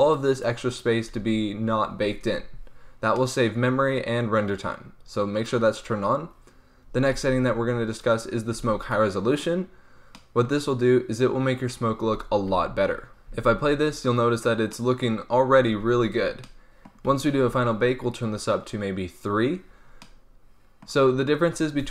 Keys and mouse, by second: 2.6-3.1 middle drag, 5.3-10.1 drag, 10.1-12.3 middle drag, 12.3 alt+a, 13.2 alt+a, 17.0 alt+a.